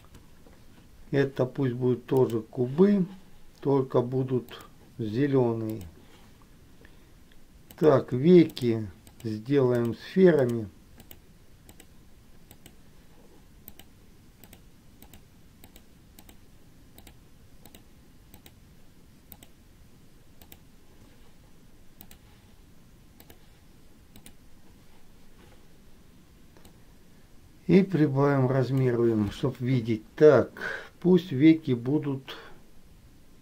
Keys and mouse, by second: 2.4 click, 5.8 click, 7.9 click, 8.7 shift+click, 9.2 shift+click, 9.9 shift+click, 10.7 shift+click, 11.2 shift+click, 12.8 shift+click, 13.9 shift+click, 14.6 shift+click, 15.2 shift+click, 16.5 shift+click, 18.6 shift+click, 19.5 shift+click, 20.6 shift+click, 22.2-23.7 drag, 24.3 click, 27.0-29.3 drag.